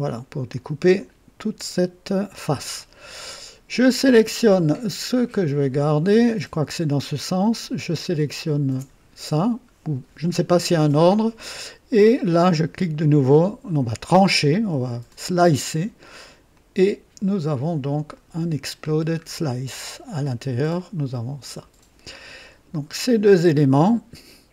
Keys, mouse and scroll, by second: 0.5-2.6 drag, 3.9 click, 5.1 click, 7.8 ctrl+click, 15.0 click, 16.4-17.1 drag, 18.1 click, 18.8 scroll down 2, 19.9 click, 20.7 click, 22.4 click, 23.7-24.5 drag.